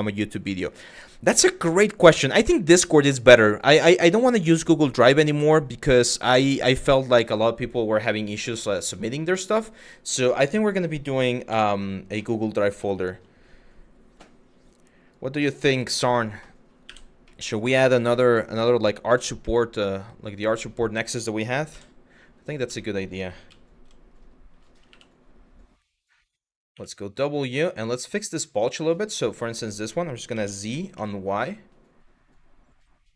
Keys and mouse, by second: 9.0 shift+middle click, 11.1 1, 11.9 middle click, 12.5 middle click, 15.9 middle click, 16.5 1, 16.9 middle click, 19.2-20.5 middle drag, 21.3 KP_3, 22.5 shift+middle click, 23.1 z, 24.5 1, 26.3 w, 28.3 click, 29.9 s, 30.6 y.